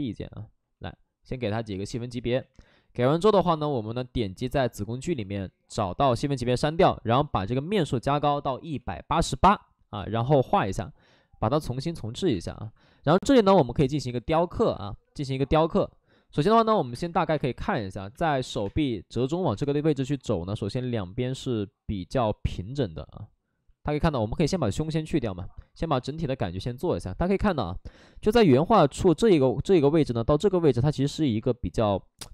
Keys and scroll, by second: 0.6 ctrl+d, 2.6 2, 8.4-9.7 typing, 12.3 space, 16.4 space, 16.8 2, 17.3 space, 18.5 2, 18.5 space.